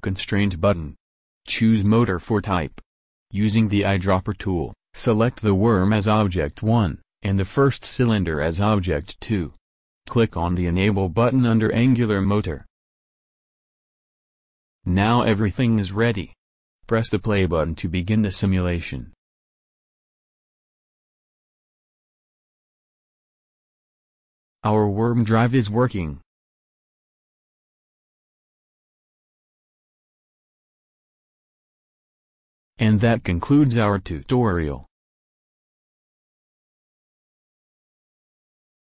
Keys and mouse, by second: 3.9-6.1 drag, 13.4-14.1 drag, 14.9-16.6 drag, 18.0 click, 22.3-22.9 middle drag, 22.9 click, 31.0 middle click.